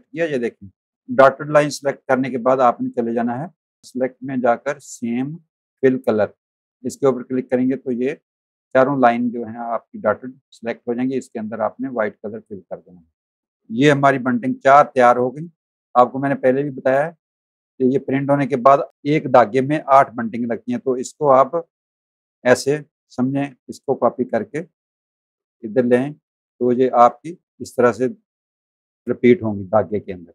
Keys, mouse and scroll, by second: 0.4 click, 1.0 click, 1.7 click, 7.1 click, 11.3 click, 12.5 click, 13.4 z, 14.0 v, 14.7 click, 21.3 click, 22.4 space, 23.6 alt+click, 26.3 click, 26.6 z, 27.9 click, 28.5 space, 28.6 click, 30.2 z.